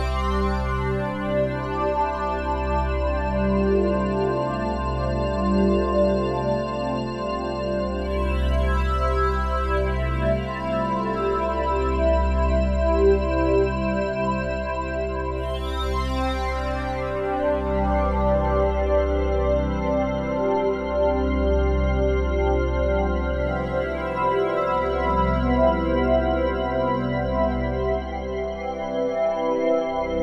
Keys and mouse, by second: 0.9 click, 1.8 click, 2.6 click, 3.7 click, 4.9 8, 5.2 Return, 5.7 click, 6.4-7.1 typing, 8.1-12.4 drag, 12.7 click, 13.0 click, 13.8 click, 14.0 click, 14.3-15.4 typing, 14.9 click, 15.9 click, 16.3 Delete, 17.1 click, 17.4 click, 17.9 typing, 19.0 click, 19.5 click, 20.1 click, 21.0 click, 22.3 click, 23.9 click, 24.8 alt+click, 25.8 click, 29.0 click.